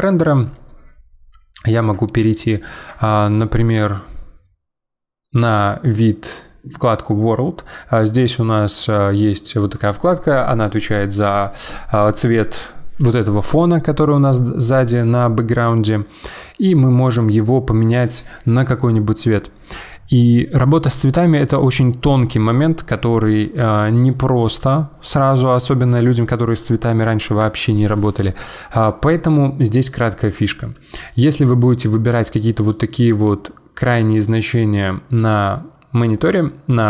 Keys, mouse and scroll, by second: 9.5 click, 17.1 click.